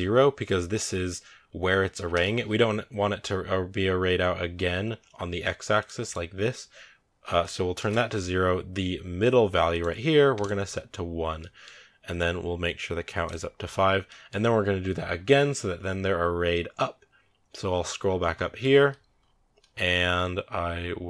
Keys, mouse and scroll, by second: 2.8 scroll down 4, 5.9 click, 7.6-10.3 drag, 11.3-11.7 middle drag, 11.7 scroll up 1, 13.2 click, 14.1-15.1 middle drag, 15.1 scroll up 1.